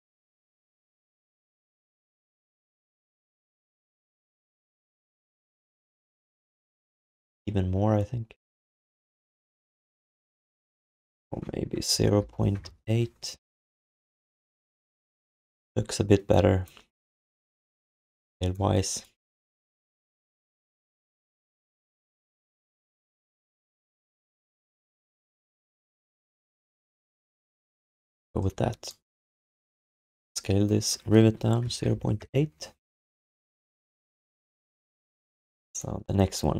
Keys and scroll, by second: 6.8 z, 12.1 ., 24.8 alt+shift+d, 25.8 ctrl+s, 31.8 ., 35.3 ctrl+s.